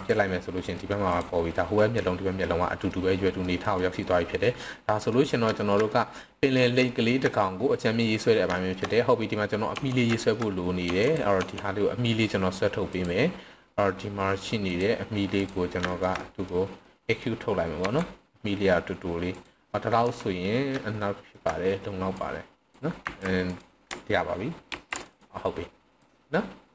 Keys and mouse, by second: 0.8 middle click, 1.6 middle drag, 2.4 middle click, 3.4 middle click, 3.8 middle click, 4.4-5.1 middle drag, 5.6 shift+middle click, 5.9-6.6 middle drag, 6.9 shift+middle click, 7.3-8.0 middle drag, 8.6 shift+middle click, 8.9 middle click, 9.8 Tab, 10.1 shift+middle click, 10.9 Tab, 11.1 click, 11.3 Tab, 12.8 click, 14.6 click, 15.3 click, 15.9 shift+middle click, 16.1 middle drag, 16.8 middle click, 17.9 e, 19.3 click, 20.0 KP_3, 21.0-21.3 shift+middle drag, 22.2-22.7 drag, 23.1 s, 23.4 click, 24.6 ctrl+r, 25.1 click, 25.9 click.